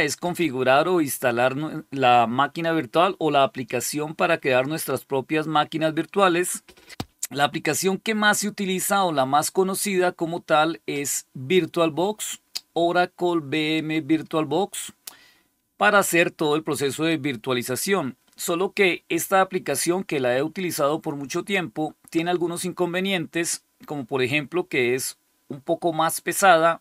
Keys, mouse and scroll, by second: 9.3 click.